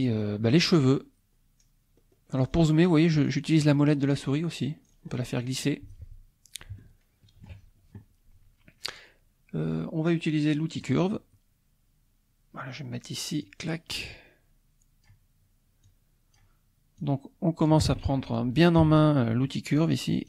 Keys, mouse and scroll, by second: 0.8 scroll up 1, 1.6 scroll down 1, 2.0-2.4 scroll up 1, 2.4-2.8 scroll down 1, 2.8-3.2 scroll up 1, 3.5 scroll down 1, 3.7 scroll up 1, 4.1-4.6 scroll down 1, 4.6 scroll up 1, 4.8-5.1 scroll down 1, 5.1-5.5 scroll up 1, 5.5-6.7 scroll down 1, 6.8 shift+middle click, 10.8 click, 13.4-15.2 drag, 15.8 click, 17.1 click, 18.8 e.